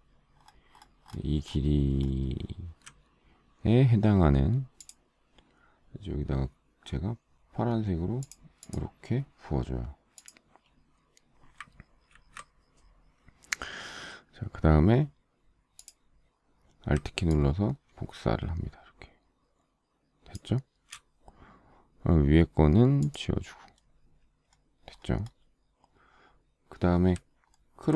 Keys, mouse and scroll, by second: 0.8 alt+scroll down 1, 12.5 ctrl+d, 17.7 alt+click, 27.8-27.9 alt+scroll down 1.